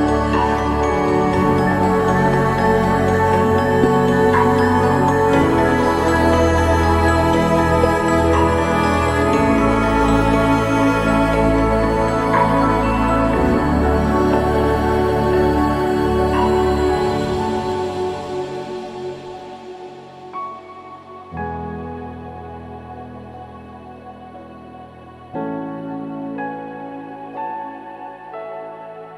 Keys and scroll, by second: 20.8 ctrl+=, 22.1 ctrl+z, 24.7 ctrl+d, 26.6 ctrl+z, 27.0 ctrl+z, 27.2 ctrl+z, 27.3 ctrl+z, 28.0 ctrl+0.